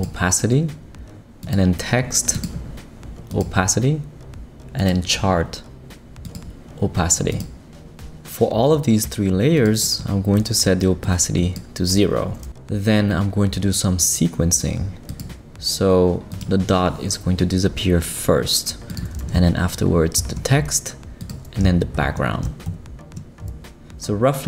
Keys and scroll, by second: 20.2 shift+Right, 21.9 shift+Right.